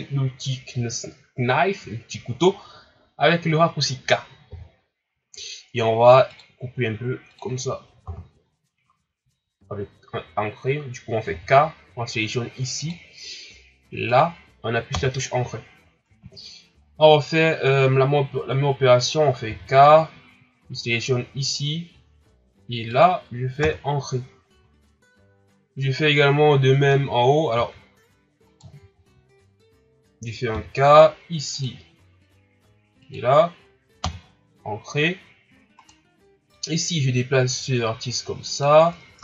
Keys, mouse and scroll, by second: 0.5-1.8 ctrl+scroll up 2, 1.8-2.9 shift+scroll up 2, 4.4 k, 11.3 k, 16.5-18.9 shift+scroll up 1, 19.4 k, 27.5 ctrl+r, 30.5 k, 35.8 right click, 36.5-39.1 drag, 39.1 ctrl+Tab.